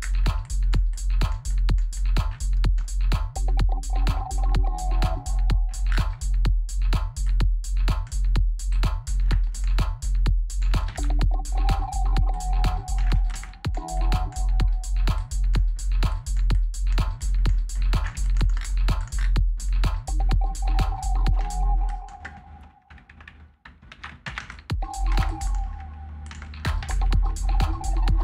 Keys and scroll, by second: 10.6 ctrl+s, 12.7 space, 21.1 space, 23.7 ctrl+a, 26.1 space, 26.6 ctrl+s.